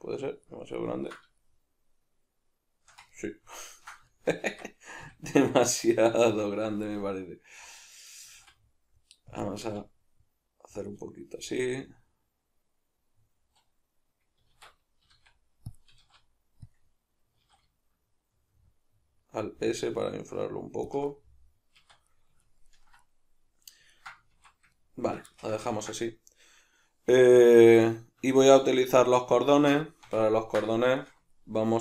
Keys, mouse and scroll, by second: 4.4 Tab, 5.0 a, 6.1 s, 7.0 right click, 8.2 s, 9.4 click, 9.5 s, 10.8 click, 11.4-15.8 middle drag, 14.5 alt+q, 15.1 s, 15.8 click, 15.9 s, 16.7 click, 17.4 alt+s, 20.9 shift+click, 21.1-21.8 middle drag, 21.8 Tab, 22.1-31.8 middle drag, 24.3 alt+q.